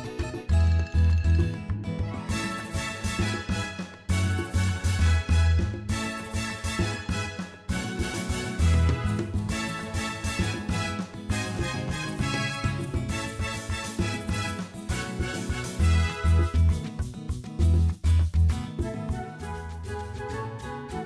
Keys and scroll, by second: 3.2 ., 3.8 1, 5.2 Return.